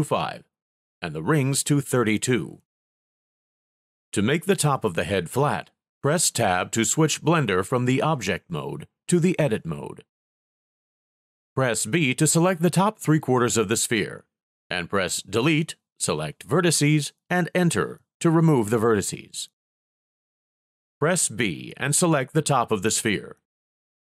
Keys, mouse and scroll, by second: 6.9 Tab, 11.1 b, 17.7 Delete, 20.6 b.